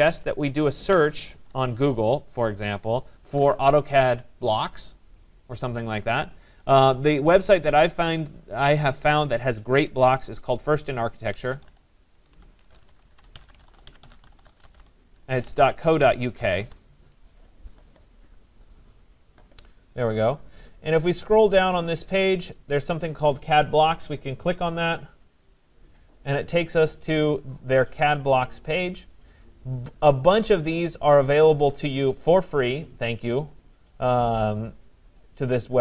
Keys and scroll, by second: 16.6 Return.